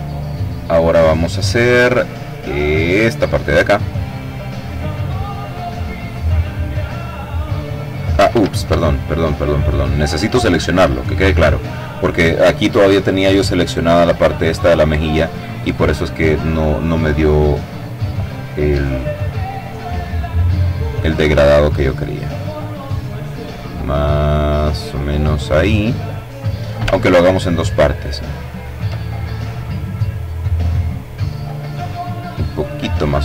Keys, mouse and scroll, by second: 1.5 click, 5.2-7.1 drag, 6.9 ctrl+z, 8.1 click, 9.1 click, 12.9 click, 13.8 click, 17.2 click, 19.2-24.9 drag, 25.9-26.3 ctrl+scroll up 2, 28.5 click, 31.2-32.5 drag, 33.0 click.